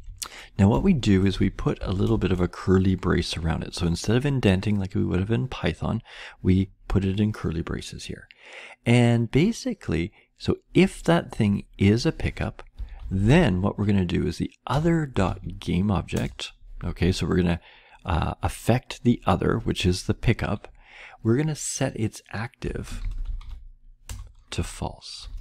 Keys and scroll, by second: 0.0 Right, 0.5-1.8 typing, 2.0 Return, 12.5-16.2 typing, 22.4-23.8 typing, 24.0 Return, 24.9-25.4 typing.